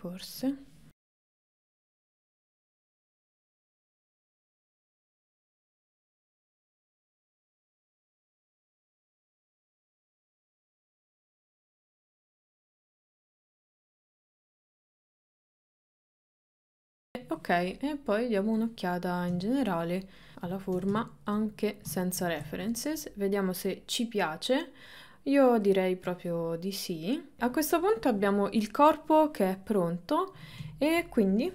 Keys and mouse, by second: 1.0 g, 2.6 click, 3.2 g, 3.6 click, 3.7 g, 5.1 click, 5.6 g, 6.1 g, 7.0 shift+middle click, 7.2 click, 7.5 click, 7.8 g, 8.2 click, 8.4 g, 8.8 click, 9.2 middle click, 9.5 KP_3, 9.8 click, 10.2 click, 10.6 shift+middle click, 10.9 click, 11.1 click, 11.5 ctrl+middle click, 11.7 shift+middle click, 12.2 KP_7, 12.9 shift+middle click, 13.2 click, 13.4 click, 14.0 click, 14.3 click, 14.6 middle click, 14.9 KP_1, 15.0 KP_3, 15.6 click, 15.9 click, 16.4 shift+middle click, 16.8 shift+middle click, 18.4 click, 18.9 middle click, 19.8 middle click, 21.5 middle click, 22.8-25.6 middle drag, 26.4-27.4 middle drag, 28.8 middle click, 29.6 middle click, 31.1 middle click.